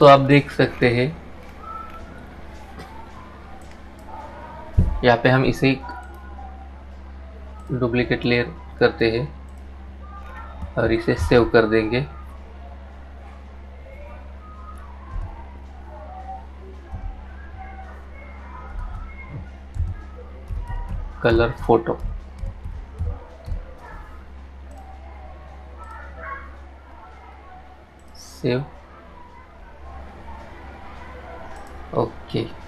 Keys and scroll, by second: 10.6 ctrl+shift+s.